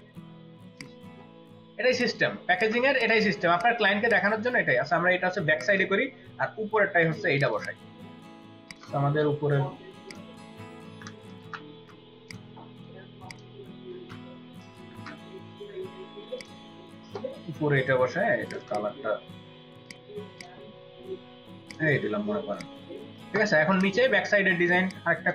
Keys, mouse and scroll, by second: 3.0 ctrl+alt+click, 4.3 ctrl+click, 4.3 space, 5.4 ctrl+space, 5.5 ctrl+alt+click, 7.5 double click, 10.8 ctrl+a, 11.3 ctrl+shift+c, 11.7 ctrl+d, 11.7 ctrl+shift+c, 13.5 ctrl+middle click, 13.9 ctrl+v, 14.8 ctrl+s, 18.6 double click, 23.5 ctrl+space, 23.7 ctrl+click, 24.7 space, 25.2 space.